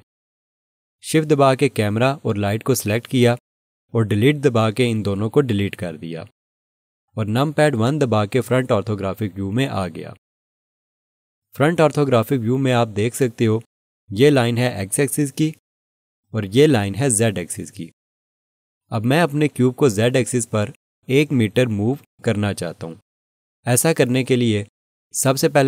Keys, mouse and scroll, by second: 2.0 shift+click, 2.9 shift+click, 8.5 1.